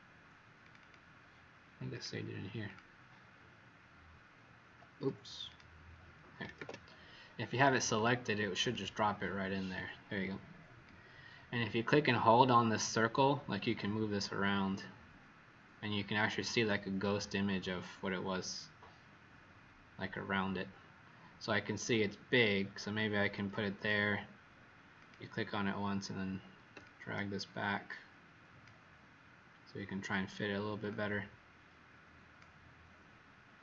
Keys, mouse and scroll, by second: 0.7 click, 1.9 click, 4.9 Escape, 5.4 click, 6.5 ctrl+d, 7.9 click, 8.6 click, 10.8 click, 26.8 shift+click, 30.8 shift+click.